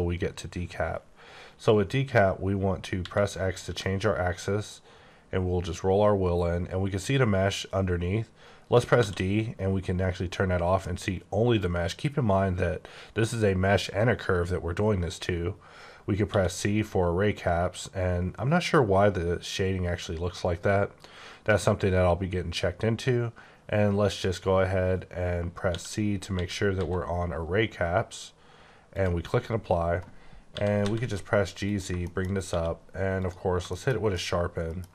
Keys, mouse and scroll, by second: 3.0-3.6 typing, 9.0 d, 16.3 c, 25.7-26.8 typing, 28.9 click, 29.3-29.7 scroll down 3, 30.5-30.8 typing, 31.7 click, 32.0 shift+middle click, 32.3 shift+scroll up 3, 32.5 q, 33.1 click, 33.7 shift+middle click, 34.8 scroll up 1.